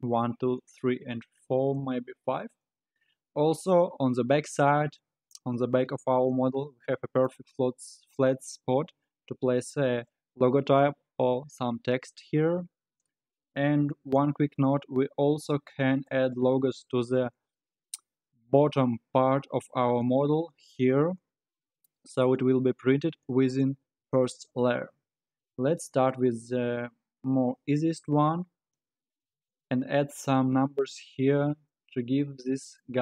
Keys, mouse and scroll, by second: 0.7-3.8 middle drag, 5.0-8.0 middle drag, 12.7-13.4 scroll up 5, 13.4-14.6 scroll down 2, 14.6-17.6 middle drag, 24.8-26.5 middle drag, 26.5-27.2 scroll up 2, 27.2-27.9 scroll down 4, 31.7-33.0 middle drag.